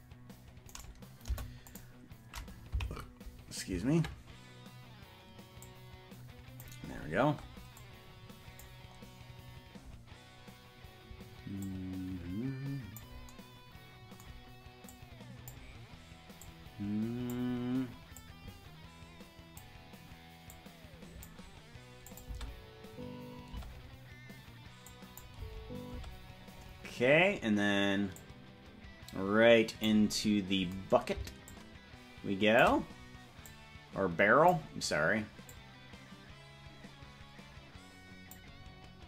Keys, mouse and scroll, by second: 0.9 right click, 1.3 Delete, 3.1 Left, 5.7-6.8 drag, 7.9 click, 11.7-13.1 drag, 14.9 click, 16.5-17.5 drag, 18.2-19.7 drag, 20.5 click, 22.2-23.8 drag, 22.5 space, 23.7 space, 25.0-26.1 drag, 25.5 space, 26.1 space, 28.2-30.0 drag, 31.5-32.7 shift+drag, 33.5-34.6 drag, 35.5-38.5 drag.